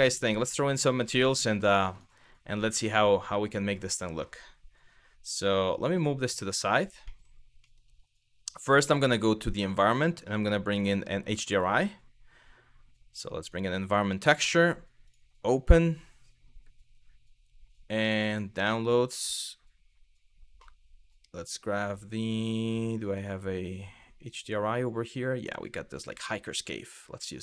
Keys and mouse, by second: 1.5 click, 3.0-3.3 middle drag, 5.4 g, 6.1 click, 6.7 middle drag, 7.3 middle click, 9.2 click, 10.4-13.2 drag, 14.7 click.